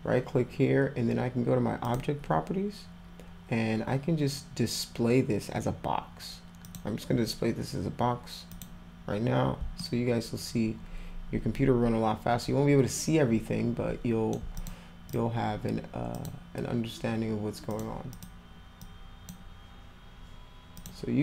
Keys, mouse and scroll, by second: 1.9 click, 4.9 scroll up 1, 5.7 scroll up 1, 6.6 click, 8.5 click, 9.8-14.3 alt+middle drag, 14.6 click, 15.1 click, 16.1 click, 17.7 click, 18.1 click, 20.7 click.